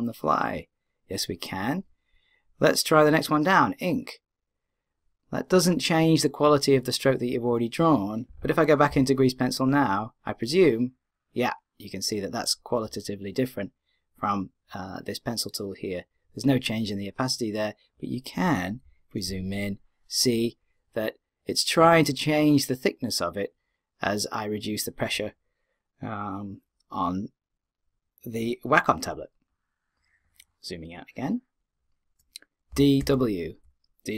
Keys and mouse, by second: 8.9-10.2 d, 10.3-12.0 drag, 19.6-21.3 middle drag, 21.4 middle click, 29.5-31.0 middle drag, 31.0-32.7 drag.